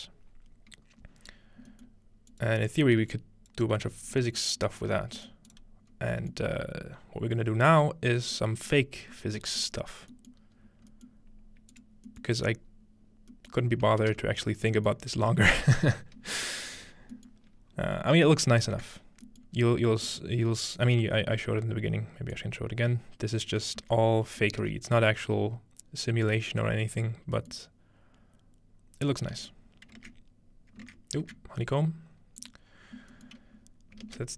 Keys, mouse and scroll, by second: 2.3 click, 2.6-4.4 scroll down 2, 3.2 click, 3.8 g, 4.6 ctrl+click, 5.5 click, 5.9-7.3 scroll up 2, 7.9-9.6 scroll down 2, 10.6-11.1 scroll up 2, 11.7-13.3 drag, 12.5 scroll down 1, 13.1-14.1 scroll down 2, 16.9 scroll down 2, 18.4-18.8 scroll down 1, 19.6-21.3 scroll up 3, 21.3-22.1 scroll up 1, 22.4-24.0 drag, 23.8 z, 24.6 middle click, 24.6 space, 29.3 space, 32.4 click, 33.3 middle click, 33.6-34.3 scroll down 1.